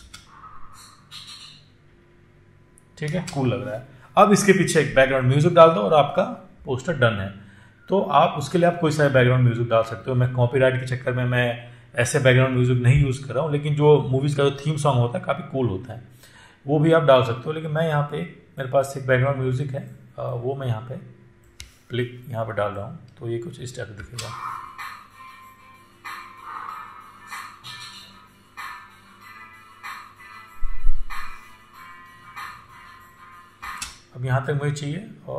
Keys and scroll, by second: 0.4 space, 3.5 space, 24.3 space, 33.9 space.